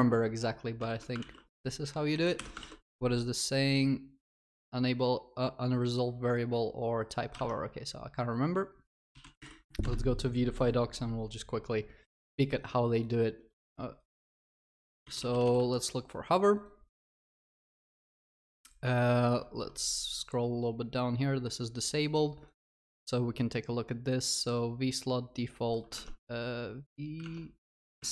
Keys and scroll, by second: 0.8 ctrl+s, 0.9 ctrl+alt+shift+l, 1.3 ctrl+s, 2.4 ctrl+y.